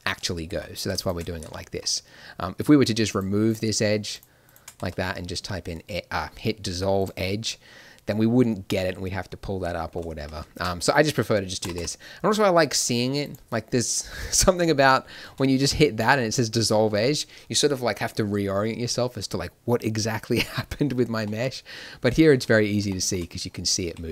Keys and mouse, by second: 1.8-7.0 drag, 4.7 x, 10.2 ctrl+z, 10.7 middle click, 11.5 g, 15.2 x.